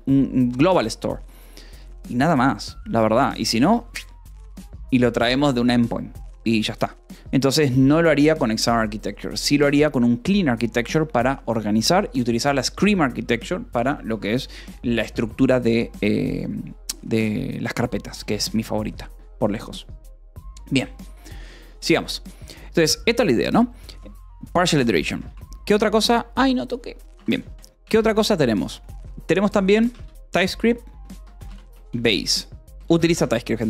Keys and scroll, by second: 25.2 space, 25.9 Escape, 26.3 Return, 27.0 a, 27.4 -, 27.7 BackSpace, 27.9 space, 29.7-33.2 typing.